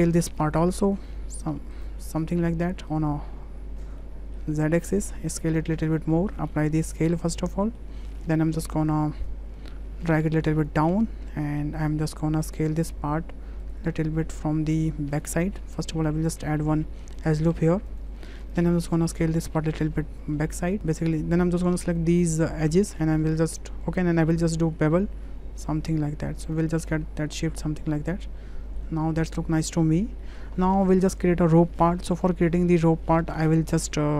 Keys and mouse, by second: 0.1 middle drag, 0.9 click, 2.2-3.8 drag, 4.1 middle click, 4.6 shift+middle click, 5.1 s, 6.3 middle click, 6.5 ctrl+a, 7.6 middle drag, 8.2 shift+middle click, 8.8 w, 9.3-10.7 drag, 11.8 click, 12.3 Tab, 13.7-15.3 drag, 16.7 click, 17.3 middle click, 18.0 click, 18.5 click, 19.2 s, 20.8 2, 21.0 click, 21.8 alt+shift+click, 24.6 ctrl+b, 26.8 click, 27.0 Tab, 28.1-28.8 drag, 29.4 shift+drag, 29.8 click, 30.2 shift+click, 31.9 click, 32.3 shift+click, 32.8 click.